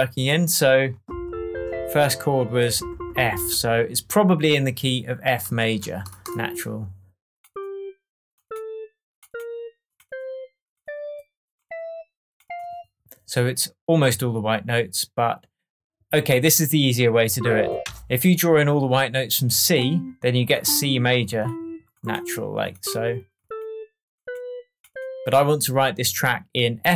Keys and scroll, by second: 17.8 BackSpace.